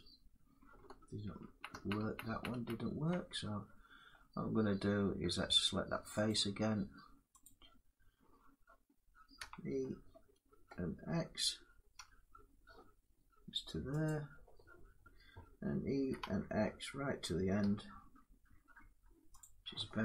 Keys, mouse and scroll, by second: 0.5-1.1 scroll down 1, 1.1 ctrl+z, 1.1 scroll up 1, 1.4 ctrl+z, 1.7 ctrl+z, 2.0 ctrl+z, 2.2 ctrl+z, 3.8 middle click, 4.6 middle click, 6.0 click, 7.1 click, 9.1 e, 11.7 x, 13.8 click, 15.8 e, 17.3 x, 19.1 click.